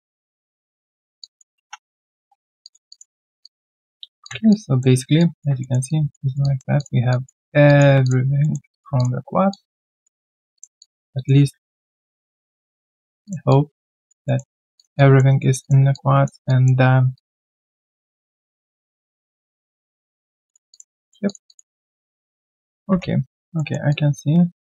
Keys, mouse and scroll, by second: 1.2 ctrl+shift+click, 1.8 alt+3, 1.8 right click, 2.2 q, 2.3-2.7 scroll down 1, 2.8 q, 2.9 alt+click, 3.1 alt+right click, 3.4 alt+click, 3.9-4.5 alt+scroll down 1, 4.5 alt+click, 5.0 alt+right click, 5.1 alt+click, 5.6 alt+middle click, 5.8 alt+click, 6.2 alt+right click, 6.4 alt+click, 7.1 alt+click, 7.4 alt+scroll down 1, 7.6 alt+click, 8.4 alt+middle click, 8.7 alt+click, 9.2 scroll down 1, 9.5 alt+click, 10.2 alt+middle click, 10.8 alt+click, 11.6 alt+click, 12.3 alt+middle click, 12.6 alt+click, 13.5 alt+click, 14.2 alt+middle click, 14.9 alt+click, 15.2 alt+right click, 15.9 alt+click, 16.8 alt+scroll down 1, 17.1 alt+click, 17.4 alt+middle click, 17.8 alt+right click, 18.0 alt+click, 20.7 alt+click, 20.9 alt+middle click, 21.4 alt+click, 21.8 alt+right click, 22.6 alt+middle click, 22.9 1, 23.2 alt+right click, 23.5 alt+middle click, 23.9 alt+click.